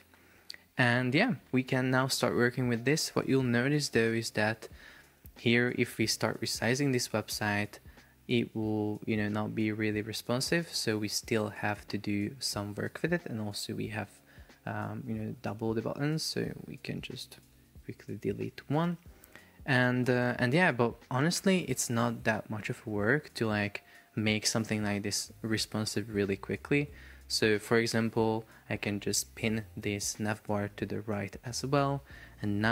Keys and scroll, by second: 4.5 super+p, 15.2 Escape, 17.7 BackSpace, 18.9 super+p, 21.5 Escape.